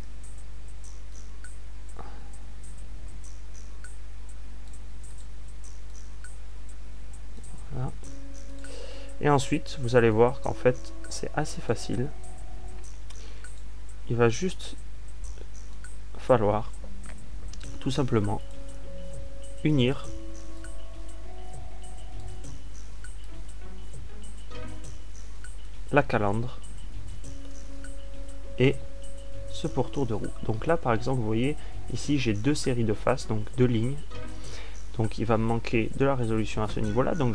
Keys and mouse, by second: 0.6-2.7 drag, 2.9 click, 3.3-5.1 drag, 6.8 click, 7.6-8.9 drag, 23.1-27.0 drag, 27.3 a, 28.1 click.